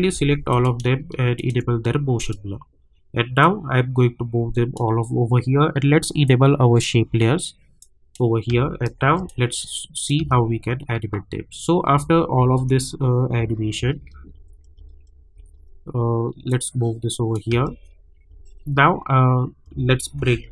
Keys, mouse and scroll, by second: 0.5 click, 1.3-8.5 shift+drag, 8.5 space, 9.2 click, 10.2 space, 16.5 click, 17.5 space, 20.2 [.